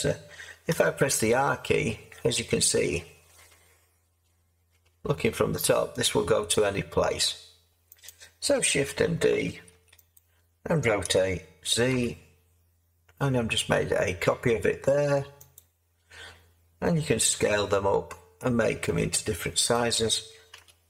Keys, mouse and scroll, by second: 0.7 r, 9.7 shift+d, 11.0 r, 11.9 r, 17.3 s, 20.5 s.